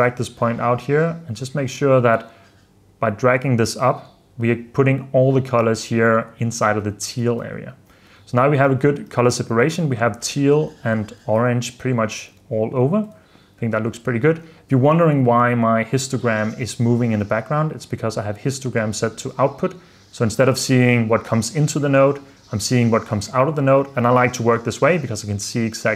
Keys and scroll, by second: 7.5 super+d, 8.2 super+f, 8.8 super+d, 12.4 super+f, 13.3 super+s.